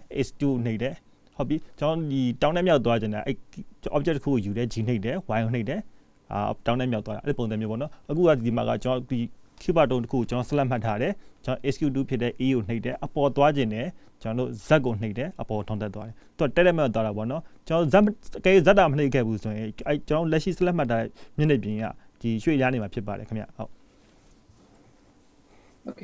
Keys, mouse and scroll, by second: 20.6 middle click, 22.5-23.0 scroll up 2, 23.0-23.5 scroll down 3, 23.4 middle click.